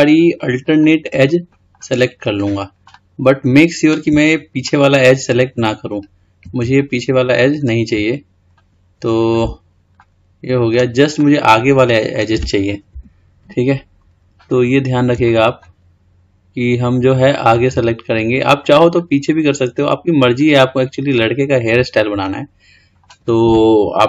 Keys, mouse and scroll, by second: 0.6 shift+click, 1.4 scroll up 1, 1.7 middle click, 2.5-3.1 scroll down 4, 3.1-4.9 middle drag, 8.7 ctrl+click, 10.2-13.1 middle drag, 13.1 KP_1, 15.4 shift+click, 17.3 shift+click, 19.1 shift+click, 20.6 shift+click, 22.3-24.0 middle drag.